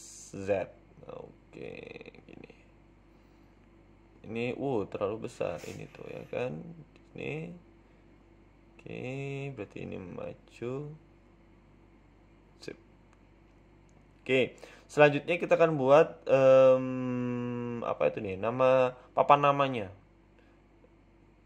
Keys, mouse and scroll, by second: 0.6 s, 4.0 Tab, 4.3 middle click, 5.0-5.3 scroll down 2, 5.3 KP_7, 5.8 Tab, 6.2 click, 7.2 g, 9.3 Tab, 9.5 middle click, 10.3 KP_3, 10.8 scroll up 2, 11.0 z, 12.5 g, 14.1 middle click, 14.5-15.5 scroll down 3, 14.6 middle click, 15.5 middle click, 16.2 KP_1, 16.6 scroll up 4, 17.3 Tab, 17.6 scroll down 2, 18.9 a, 19.8 middle click.